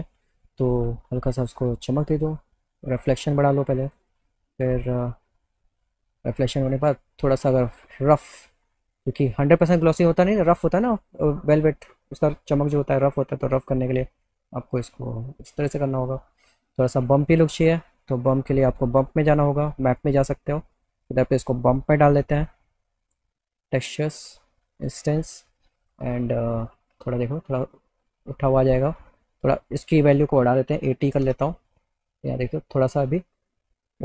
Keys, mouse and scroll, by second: 0.7 click, 2.3-3.4 drag, 3.9 click, 5.5 click, 7.2-10.0 drag, 13.5-15.9 drag, 16.8 click, 18.6 click, 19.9 click, 21.1-22.5 drag, 24.3 click, 24.8 click, 29.9 click.